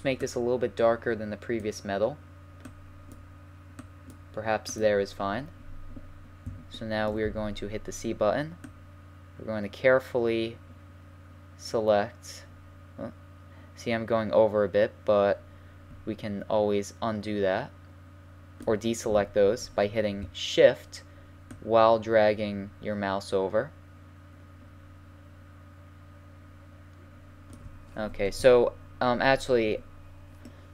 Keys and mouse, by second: 6.1-8.6 middle drag, 7.3 c, 30.5-30.7 middle drag.